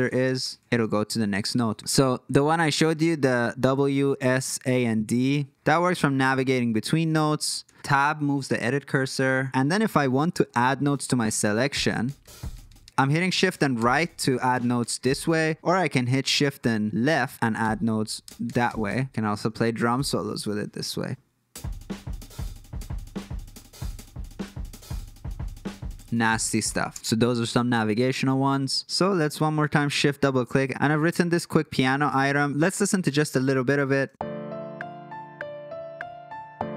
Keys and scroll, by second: 0.0 Tab, 0.2 Tab, 0.4 Tab, 0.5 Tab, 0.7 Tab, 2.4-7.5 typing, 7.6 Tab, 7.8 Tab, 8.0 Tab, 8.2 Tab, 8.5 Tab, 8.7 Tab, 10.8 shift+Right, 11.1 shift+Right, 11.3 shift+Right, 11.6 shift+Right, 11.8 shift+Right, 12.0 shift+Right, 12.2 shift+Right, 12.3 shift+Right, 12.5 shift+Right, 12.6 shift+Right, 13.5 shift+Right, 13.7 shift+Right, 14.0 shift+Right, 14.2 shift+Right, 14.5 shift+Right, 14.8 shift+Right, 15.0 shift+Right, 15.2 shift+Right, 17.5 shift+Left, 18.2 shift+Right, 18.4 shift+Right, 18.6 shift+Right, 18.8 shift+Right, 21.0 shift+Right, 26.9 space.